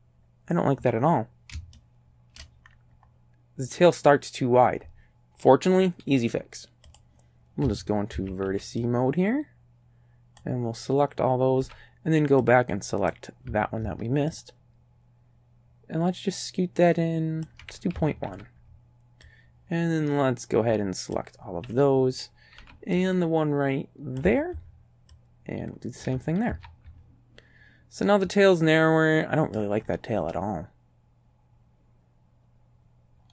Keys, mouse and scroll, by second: 1.8 shift+click, 1.9 shift+right click, 6.9 click, 7.7 a, 8.2 a, 8.5 b, 8.9-10.6 drag, 11.6 b, 12.5 click, 14.4-17.6 ctrl+drag, 18.0 ctrl+a, 18.3 b, 19.3-21.4 drag, 22.6 b, 23.0-24.4 drag, 25.2-26.2 ctrl+drag, 26.5 ctrl+a, 28.2-29.8 drag, 30.3-33.3 drag.